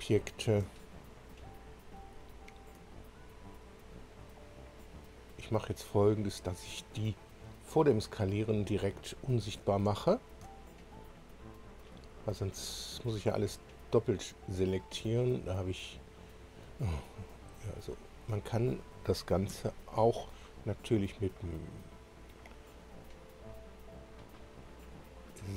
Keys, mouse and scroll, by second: 0.0 click, 1.3 ctrl+click, 2.1-2.8 ctrl+scroll up 4, 3.6 ctrl+click, 4.8 ctrl+click, 5.7 ctrl+click, 7.0 ctrl+click, 8.3-8.7 scroll down 1, 9.1 scroll up 1, 10.1-10.4 ctrl+scroll up 1, 11.4 ctrl+click, 12.8 ctrl+click, 14.1 ctrl+click, 14.7 ctrl+click, 15.5 ctrl+click, 17.4 scroll down 1, 19.5 2, 21.3-22.2 drag.